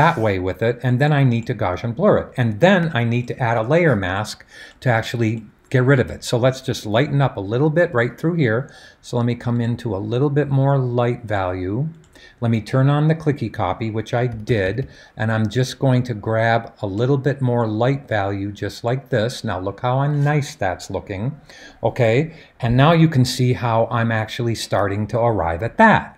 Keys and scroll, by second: 14.3 [, 14.4 [, 14.6 [, 14.8 [.